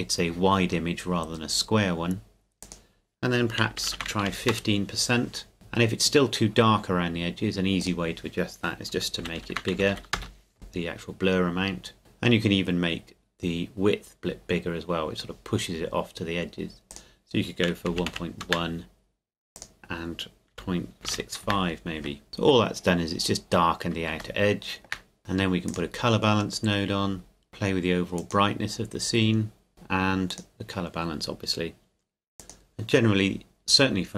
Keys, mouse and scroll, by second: 2.6 click, 3.7 KP_1, 3.8 KP_5, 3.9 Tab, 4.1 KP_1, 4.2 KP_5, 4.5 KP_Enter, 7.8 click, 9.2 KP_2, 9.4 KP_5, 9.5 Tab, 9.7 KP_2, 9.9 KP_5, 10.1 KP_Enter, 16.9 click, 17.9 KP_1, 18.0 KP_Decimal, 18.1 KP_1, 18.4 KP_Enter, 19.5 click, 20.5 KP_Decimal, 21.1 KP_6, 21.5 KP_Enter, 22.3 scroll up 1, 24.4 shift+middle click, 25.2 click, 28.2 click.